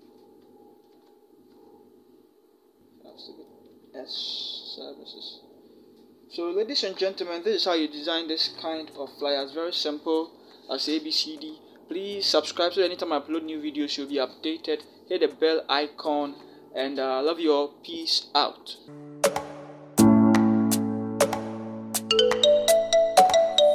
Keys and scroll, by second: 0.8 ctrl+=, 4.0 s, 8.8 ctrl+0.